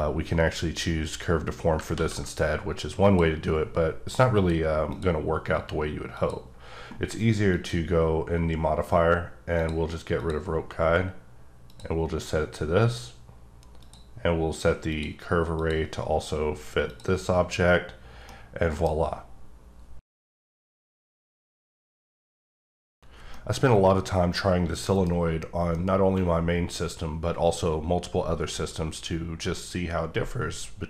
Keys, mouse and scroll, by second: 1.9 ctrl+z, 3.0 click, 4.3 click, 4.8 click, 6.2 click, 7.5 click, 9.5 click, 10.1 click, 11.6 click, 13.8 click, 14.9 click, 15.5 click, 16.9 click, 17.6-18.3 scroll up 1, 18.3 middle click, 25.7-30.8 middle drag.